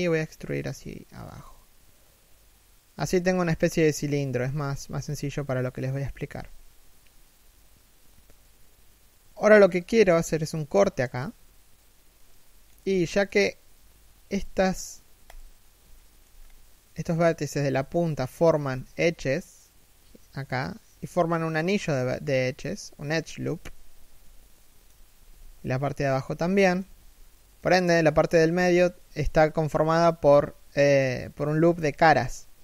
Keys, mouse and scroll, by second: 2.8 a, 3.1 middle click, 4.6 3, 5.9 1, 11.7 middle click, 12.7 alt+right click, 13.9 alt+right click, 14.8 alt+right click, 15.5 alt+shift+middle click, 15.9-16.6 scroll up 1, 17.5 alt+shift+middle click, 24.1 shift+middle click, 24.7 3, 25.3 scroll down 1, 25.6 1, 26.1 shift+middle click, 26.5 a, 26.9 middle click, 28.1 3, 28.6 KP_1.